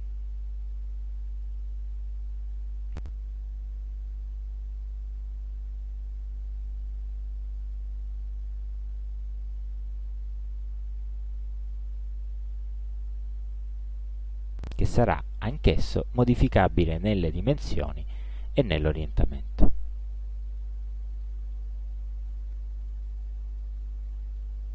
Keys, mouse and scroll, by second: 0.0 click, 3.4 click, 5.1 click, 6.4-9.4 drag, 10.6-13.8 shift+drag, 14.8-19.2 shift+drag, 20.4 click, 21.2 click, 23.5-23.8 ctrl+scroll up 1, 24.4 ctrl+click.